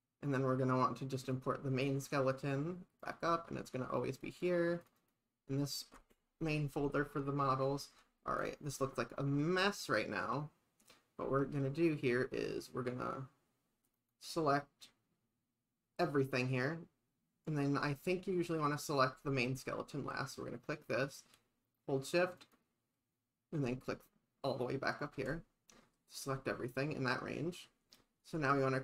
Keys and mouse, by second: 1.3 click, 1.8 click, 8.4 click, 14.0 click, 22.4 shift+click.